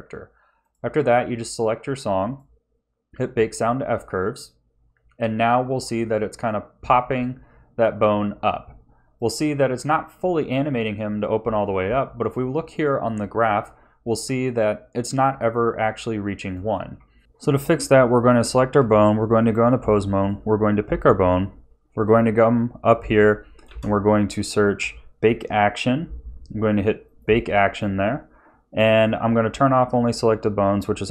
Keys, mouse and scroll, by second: 2.5 click, 4.4 click, 16.7 ctrl+s, 17.4-17.7 scroll up 3, 18.7 Tab, 20.1 click, 23.6 space.